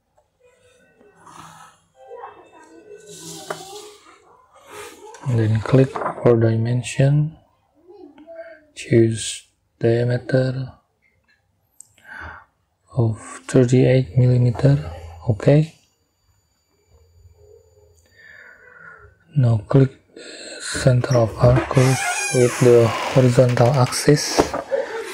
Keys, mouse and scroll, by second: 0.0 click, 2.3 click, 2.4 middle click, 3.6 middle click, 5.2 middle click, 8.0 middle click, 9.7 middle click, 9.9 click, 12.3 3, 13.0 8, 16.0 click, 16.2 middle click, 16.2 click, 20.8 click, 23.0 middle click.